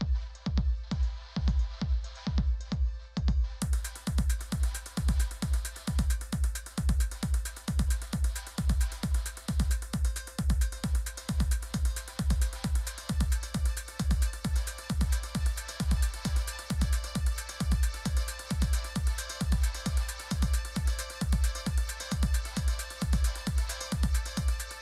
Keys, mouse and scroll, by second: 10.0-13.3 typing, 14.4-16.7 typing, 18.2-19.0 typing, 21.1-22.3 typing.